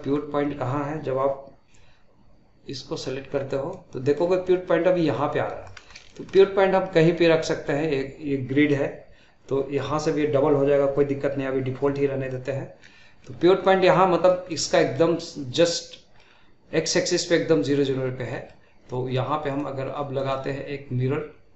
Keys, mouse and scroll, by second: 0.1-2.9 scroll down 1, 2.9-3.7 scroll down 1, 3.7-5.9 middle drag, 5.9 scroll up 1, 6.1-9.3 shift+middle drag, 12.8-19.5 middle drag, 19.5-21.5 drag.